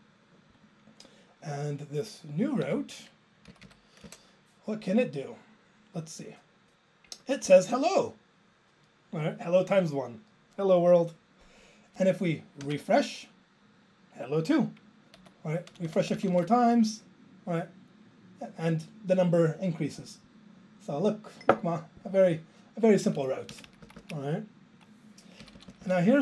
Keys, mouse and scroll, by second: 23.5 Down, 23.7 Down, 23.8 Down, 24.0 Down, 25.4 ctrl+k, 25.6 ctrl+k, 25.7 ctrl+k, 25.8 ctrl+k.